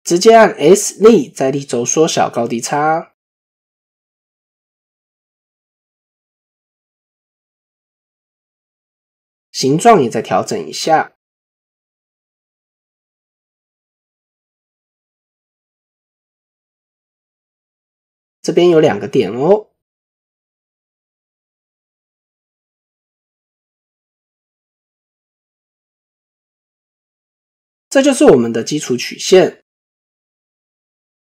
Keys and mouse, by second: 7.3 shift+click, 8.0 click, 8.6-9.7 drag, 10.0 click, 10.7 shift+click, 12.7-13.8 drag, 14.2 click, 14.9 shift+click, 16.9 click, 18.0 shift+middle click, 19.2 click, 19.9-22.0 drag, 22.9 shift+middle click, 25.7 click, 26.1 click, 26.8 click, 27.8 Tab.